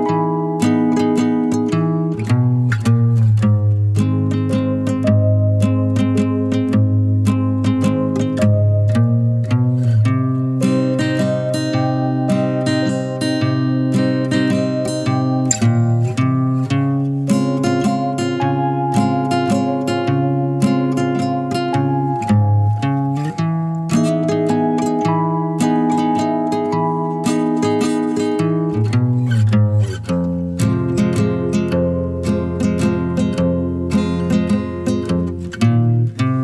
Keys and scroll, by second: 29.9 1, 32.2 2, 35.9 3.